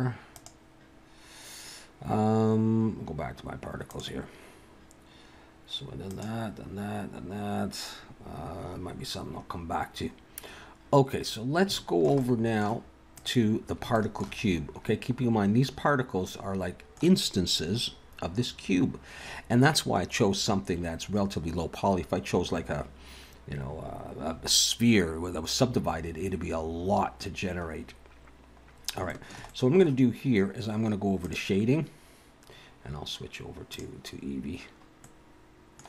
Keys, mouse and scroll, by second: 0.4 click, 3.9 click, 6.1 click, 11.2-11.6 scroll down 5, 11.8 shift+middle click, 12.2 middle click, 13.2 click, 13.9 shift+middle click, 14.4 scroll up 4, 15.7 scroll down 3, 16.3 middle click, 27.9 scroll up 2, 28.7 scroll down 1, 29.1 shift+middle click, 29.4 middle click.